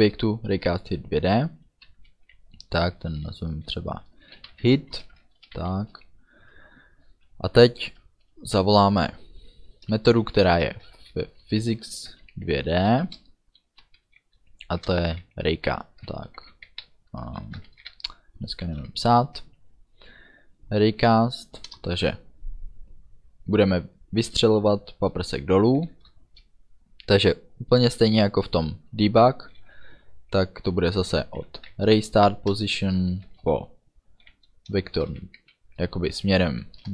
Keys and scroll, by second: 4.4-5.8 typing, 10.5 shift+p, 10.9 h, 11.8 y, 12.6 Down, 13.2 Return, 14.7-17.9 typing, 21.8 Return, 25.9 shift+9, 31.6 r, 31.8 a, 32.6 Return, 33.3 space, 35.0 shift+v, 35.2 e, 36.8 Return.